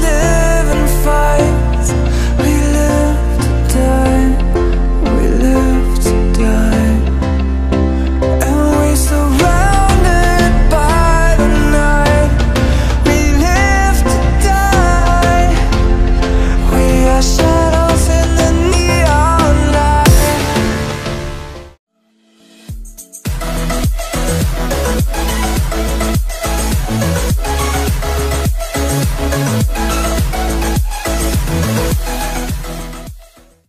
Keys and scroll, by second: 0.4 ctrl+=.